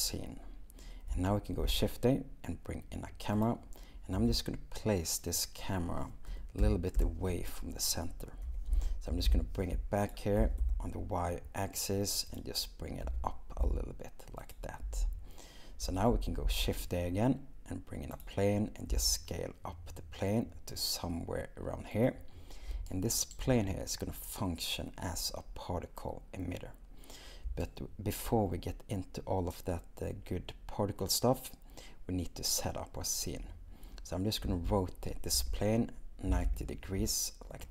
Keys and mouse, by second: 4.2 shift+n, 5.4 click, 8.5 r, 8.7 x, 9.1 9, 9.3 0, 10.4 g, 10.6 y, 12.3 click, 13.1 g, 13.6 z, 18.9 shift+s, 34.5 r, 35.4 y, 36.3 9, 36.4 0.